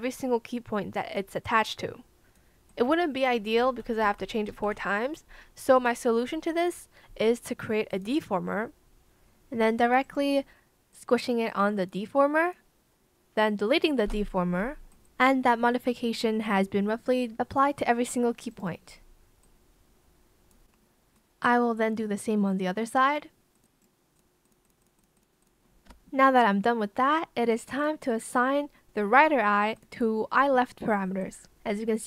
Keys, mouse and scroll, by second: 3.5 ctrl+z, 4.7 ctrl+z, 14.0 BackSpace, 22.0 Return, 25.8 BackSpace.